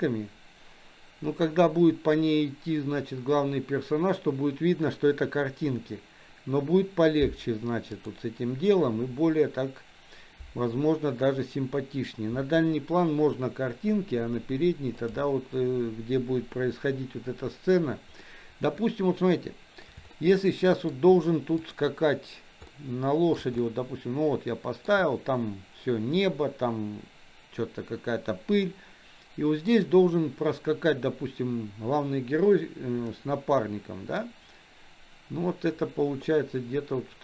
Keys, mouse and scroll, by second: 15.3 click, 18.5-20.3 middle drag, 20.5-21.3 shift+middle drag, 21.9 click, 23.0-25.0 middle drag, 28.8-30.1 middle drag, 33.2-34.3 middle drag.